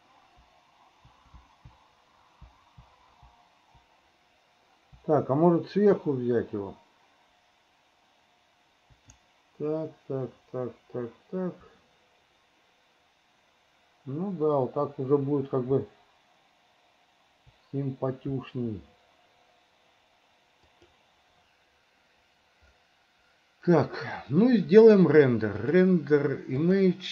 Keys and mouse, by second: 25.7-27.1 drag.